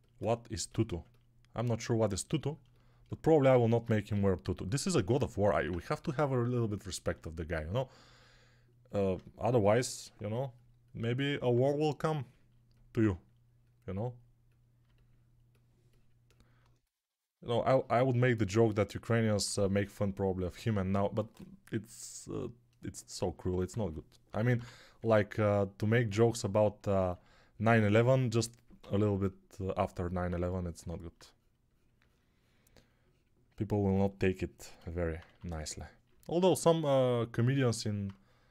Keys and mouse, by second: 4.0 g, 5.4 alt+q, 23.6 1, 24.1 [, 24.3 [, 24.4 [, 27.1 alt+q, 28.7 g, 30.2 2, 35.1 1.